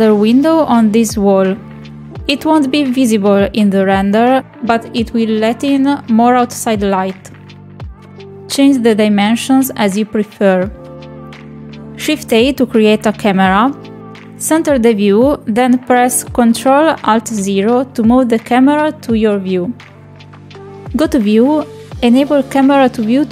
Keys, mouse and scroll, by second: 0.1 shift+middle drag, 0.4 middle click, 1.7 click, 6.1 Escape, 6.2 middle drag, 6.9 click, 8.9 click, 10.5 shift+middle click, 11.2 middle click, 11.5 middle click, 13.2 shift+a, 15.2 middle click, 15.8 shift+middle click, 17.1-18.3 shift+middle drag, 18.9 ctrl+alt+KP_0, 22.0 click, 22.3-23.0 ctrl+middle drag, 23.2 shift+middle click.